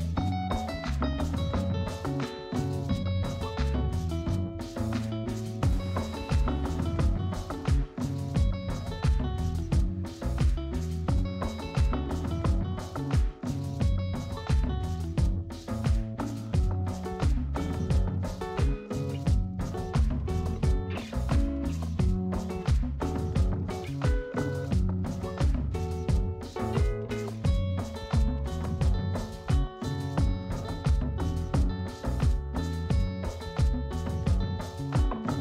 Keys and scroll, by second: 13.4 space, 16.0 space.